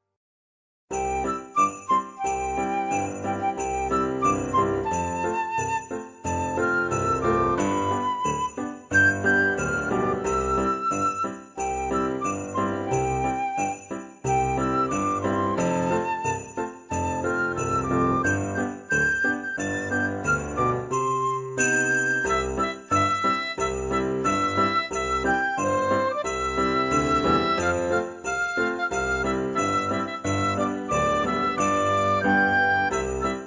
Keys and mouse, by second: 0.6 click, 0.9 ctrl+a, 1.6 click, 1.9 shift+d, 3.4 click, 4.3 click, 6.0 click, 6.1 shift+d, 6.9 click, 7.9 click, 8.7 click, 9.5 click, 9.7 shift+d, 11.1 click, 12.0 click, 12.2 shift+d, 12.9 click, 13.6 g, 14.3 click, 14.7 middle click, 15.4 middle click, 16.2 click, 16.8 alt+z, 17.1 middle click, 17.3 g, 19.3 click, 19.8 Tab, 20.1 middle click, 20.9 click, 21.2 middle click, 22.4 shift+middle click, 23.1 click, 24.2 Tab, 24.5 alt+z, 24.7 click, 25.1 alt+z, 25.7-29.8 typing, 26.4 click, 28.0 right click, 30.9 click, 31.2 shift+d, 31.4 x, 32.2 click, 32.4 right click, 32.8 click, 33.3 alt+z.